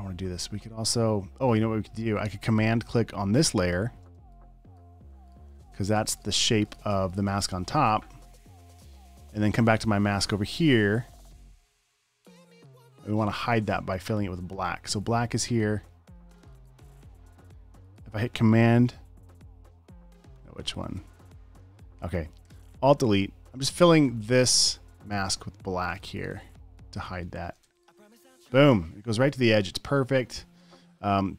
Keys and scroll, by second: 4.5 super+space, 5.2 space, 6.4 alt+super+space, 7.7 space, 7.9 space, 16.4 space, 16.9 super+space, 21.3 alt+BackSpace, 22.0 super+z, 24.0 alt+BackSpace, 26.1-28.0 typing, 27.6 super+d, 29.9 space, 30.9 super+space.